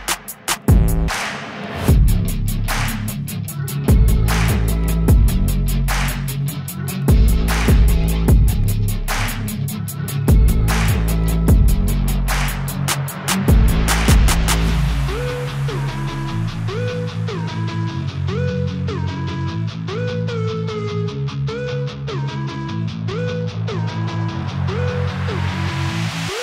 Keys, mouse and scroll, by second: 0.0 ctrl+shift+drag, 0.3-1.3 drag, 1.6 ctrl+shift+click, 1.9 ctrl+shift+click, 4.5-5.6 drag, 8.4-11.4 drag, 12.7 click, 13.2 n, 13.6 drag, 13.7 n, 13.9 click, 14.0 ctrl+t, 15.1-19.3 drag, 19.6-21.1 drag, 21.1 ctrl+shift+right click, 21.6 scroll up 2, 21.7-22.7 drag, 22.9-25.1 drag.